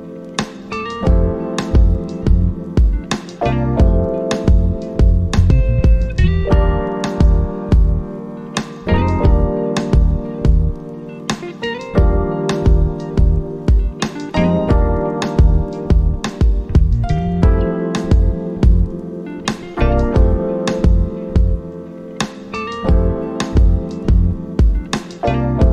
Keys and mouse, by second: 3.1 click, 10.3 typing, 18.7 click, 18.7 typing, 21.1 typing, 23.4 click.